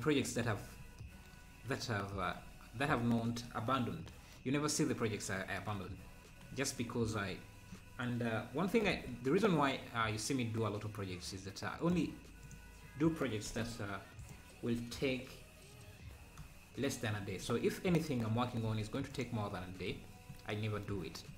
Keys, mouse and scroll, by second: 6.5 scroll down 3, 8.9 c, 12.5 click, 14.3 click, 16.4 3, 16.9 click, 18.1 shift+click, 19.2 click.